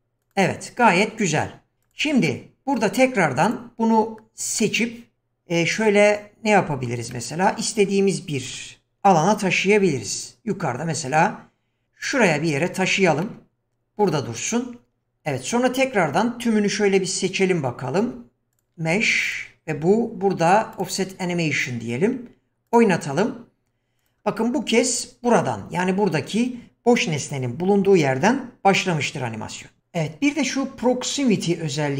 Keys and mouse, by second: 0.2 click, 2.2-2.8 middle drag, 4.6-6.9 middle drag, 7.1-7.6 middle drag, 8.5 KP_7, 9.8 g, 13.2-14.6 middle drag, 18.0 q, 20.8 click, 22.6 click, 24.0 click.